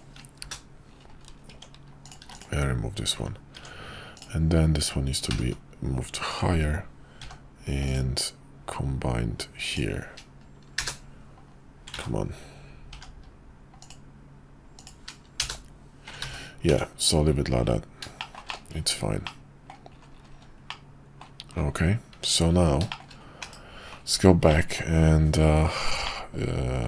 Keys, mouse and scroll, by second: 1.5 Tab, 2.2 x, 3.5 Tab, 4.2-5.3 drag, 5.3 g, 7.2 k, 12.1 ctrl+z, 12.9 k, 16.3 ctrl+z, 16.7 Tab, 18.2 shift+middle drag, 18.5 middle drag, 19.2-19.7 middle drag, 20.7-21.2 middle drag, 22.9 shift+middle click, 24.5 middle click, 26.1-26.8 middle drag.